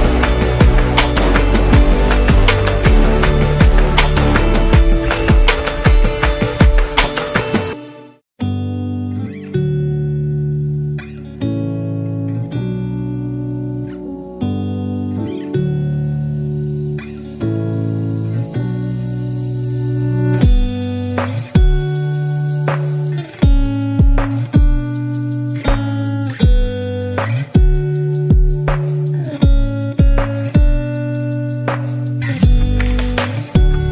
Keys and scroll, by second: 0.0-5.9 typing, 8.6 Return, 8.9 shift+c, 11.2-15.9 typing, 17.6-18.2 typing, 19.5-23.0 typing, 27.4 v, 28.2 super+-.